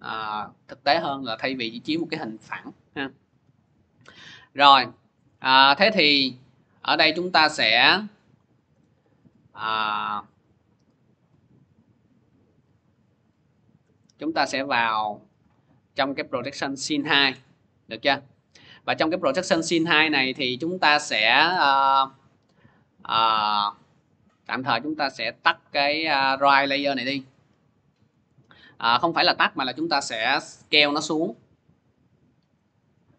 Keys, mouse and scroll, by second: 1.2-1.7 scroll, 13.1-14.3 drag, 14.3-19.4 middle drag, 20.0-25.2 middle drag, 25.2-30.3 drag, 29.6 s.